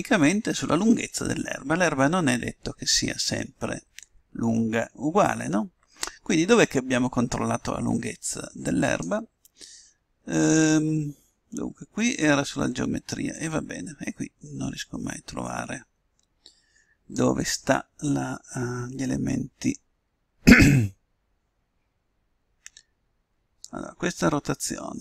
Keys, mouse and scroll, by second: 6.3-7.9 drag, 14.4-16.0 drag, 20.5-23.4 middle drag, 24.1-25.0 middle drag.